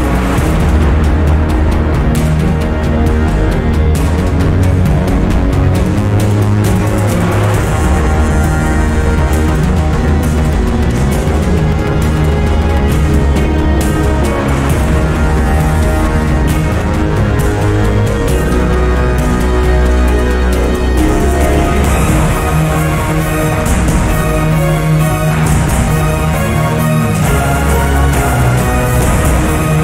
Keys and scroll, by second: 7.5-9.0 typing, 17.0-18.6 typing, 25.0 2, 25.9 0, 26.5 Return.